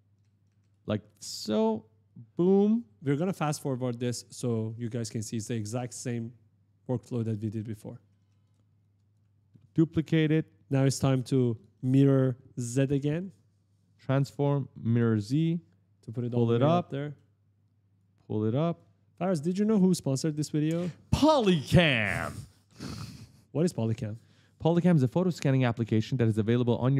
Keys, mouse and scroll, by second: 0.0-0.3 typing, 0.0 right click, 0.4 right click, 1.9 alt+click, 3.9-4.7 typing, 4.3 right click, 5.4 alt+click, 6.8-8.5 typing, 7.0 right click, 7.2 right click, 7.4 right click, 7.6 right click, 7.9 right click, 8.1 right click, 8.6 alt+click, 8.9 click, 9.2 alt+click, 10.8 click, 11.3-12.3 typing, 11.8 right click, 12.6 right click, 14.5 click, 15.9 click, 16.5 right click, 16.5 right click, 16.6 right click, 16.7 right click, 17.8 click, 19.6 click, 21.5 f, 21.8 right click, 21.9 right click, 22.2 right click, 22.3 right click, 22.5 right click, 22.7 right click, 22.8 right click, 23.0 right click, 23.1-25.2 typing, 23.8 right click, 24.2 right click, 24.5 right click, 25.2 right click, 26.6 click.